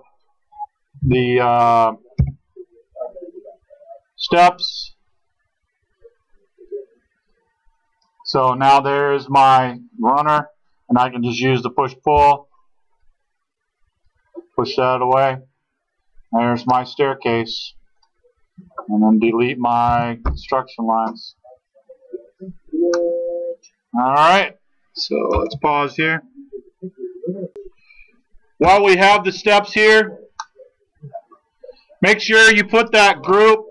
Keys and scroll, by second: 1.1 p, 2.2 l, 10.3 space, 12.1 p, 19.9 ctrl+d, 27.6 space.